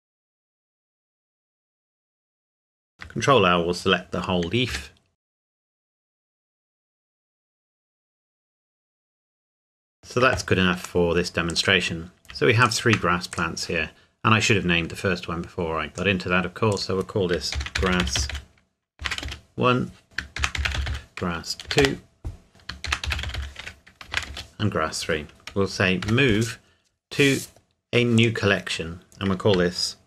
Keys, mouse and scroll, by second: 0.0-1.9 typing, 0.0 Escape, 0.3 Escape, 0.7 click, 1.0 click, 1.8 click, 2.0 click, 2.1 middle click, 2.4 shift+middle click, 2.5 click, 3.0 ctrl+l, 4.7-6.4 typing, 5.2 Escape, 5.5 click, 5.8 click, 5.9 middle click, 6.0 Tab, 6.2 right click, 6.6 click, 7.1 middle click, 7.2 scroll up 1, 7.5 click, 7.8 ctrl+l, 7.8-9.0 typing, 8.1 click, 8.2 middle click, 8.5 click, 8.6 middle click, 8.8 scroll up 1, 9.1 click, 9.7 middle click, 9.8-11.1 scroll down 1, 11.5 click, 12.6 shift+click, 13.3 click, 15.9 click, 17.6-19.0 typing, 19.2 Return, 20.0 click, 20.4-21.6 typing, 21.8 Return, 22.5 click, 22.8-24.1 typing, 24.3 Return, 25.3 m, 26.0 m, 28.2 click.